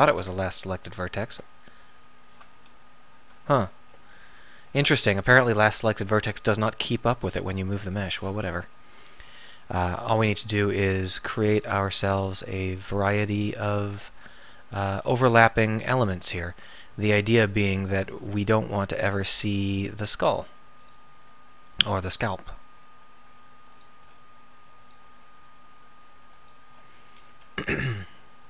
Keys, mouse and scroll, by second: 0.9 ctrl+., 2.7 alt+., 3.6 ctrl+., 4.8-5.9 middle drag, 6.5 KP_7, 7.9 t, 9.3 g, 10.0 r, 11.9 g, 15.3 g, 18.1 g, 23.0 g, 24.0 r, 25.1 g, 27.3 KP_7.